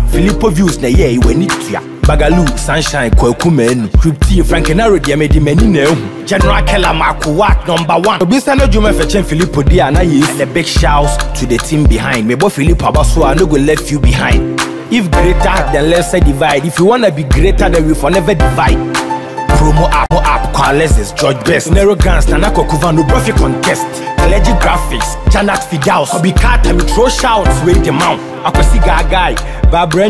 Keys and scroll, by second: 2.1 ctrl+-.